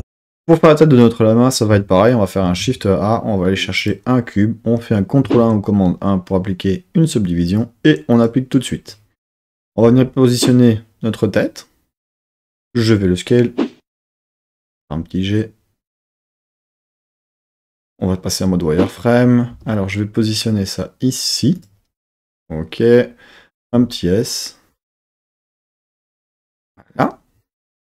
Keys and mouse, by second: 2.4 shift+a, 5.2 super+1, 7.5-8.4 drag, 9.8 g, 12.1 click, 12.7 s, 14.0 click, 14.6 g, 17.3 click, 17.7 z, 19.5 g, 21.5 click, 23.5 s, 26.5 click.